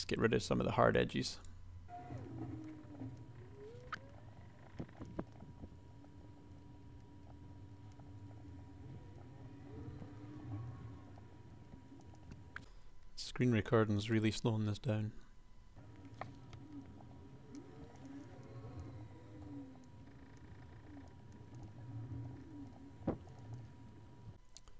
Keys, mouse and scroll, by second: 2.6 click, 2.9 ctrl+z, 3.6-11.7 typing, 4.3 ctrl+r, 10.0 ctrl+r, 10.5 ctrl+r, 13.7 a, 15.8-17.8 typing, 17.8 Tab, 18.3 Tab, 20.0 r, 20.2 g, 20.8 KP_1, 21.5 shift+click, 21.8 ctrl+shift+super+r, 22.2 click, 22.3-24.3 typing.